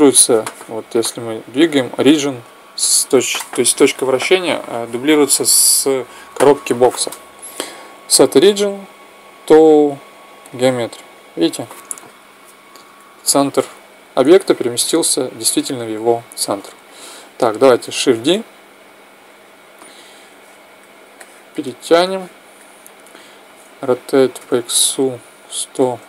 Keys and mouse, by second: 0.5-2.4 right drag, 7.9-9.6 drag, 16.3 t, 17.9 shift+d, 20.1-23.5 drag, 23.5 r.